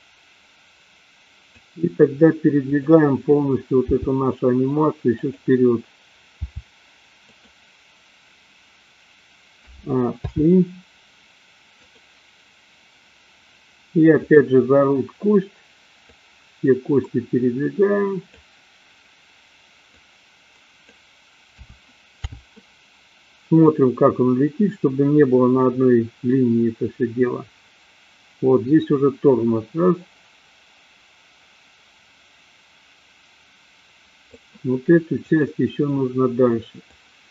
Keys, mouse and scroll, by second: 2.6 click, 3.9 g, 6.4 g, 9.6 a, 10.3 i, 12.0-12.5 drag, 14.1 click, 16.1-18.5 drag, 19.9-21.0 drag, 21.6 a, 22.3 i, 24.0-34.8 drag, 35.3 click, 36.8-37.3 drag.